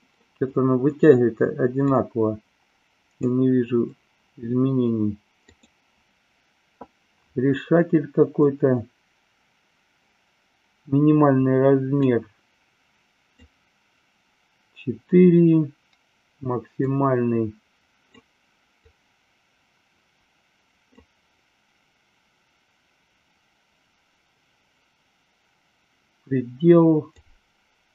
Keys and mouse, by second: 1.8-3.2 drag, 5.5 click, 12.0-13.4 drag, 16.7-18.1 drag, 18.7-21.0 drag, 27.2-27.9 drag.